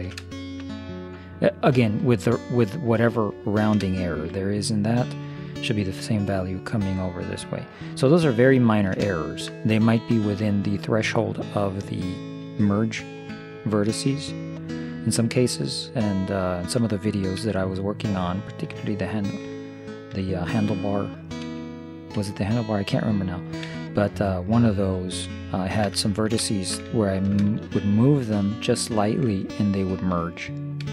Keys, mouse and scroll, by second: 3.4-7.3 middle drag, 8.6-11.1 middle drag, 13.5-16.1 middle drag, 17.5 z, 21.5 x, 23.7 z, 24.5 middle click.